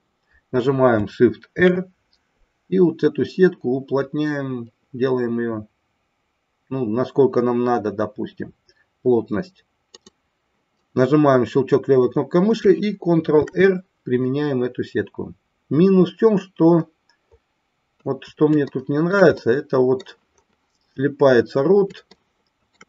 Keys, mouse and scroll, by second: 1.4 shift+r, 15.5 ctrl+r, 18.7 shift+middle click, 19.4 middle click, 22.1 shift+middle click.